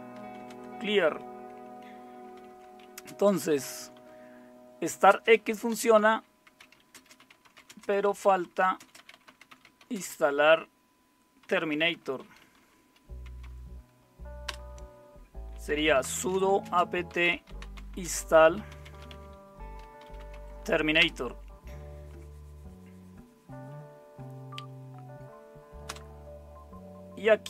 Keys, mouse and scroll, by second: 0.0-0.9 typing, 2.4-14.5 typing, 15.5-21.0 typing, 25.9 Return.